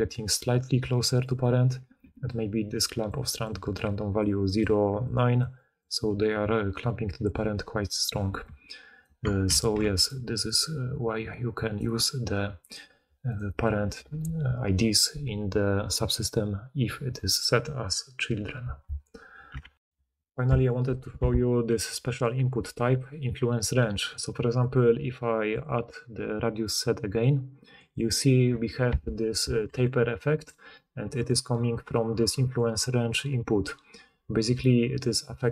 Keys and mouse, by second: 0.0-2.0 typing, 2.0-5.4 drag, 2.0-5.4 middle drag, 2.0-5.4 right drag, 3.1-8.4 typing, 9.6 ctrl+z, 9.9 d, 11.8 d, 11.8 d, 12.7-13.2 drag, 13.3-30.7 drag, 19.8 ctrl+alt+Insert, 29.7-30.6 d, 31.3 d, 31.3 d, 31.4 d.